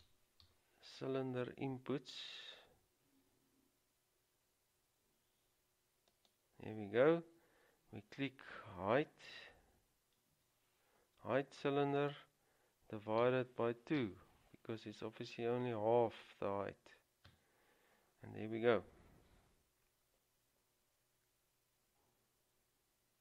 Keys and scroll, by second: 0.2 typing, 9.4 typing, 10.5 typing, 13.4-14.1 typing, 17.5 Return.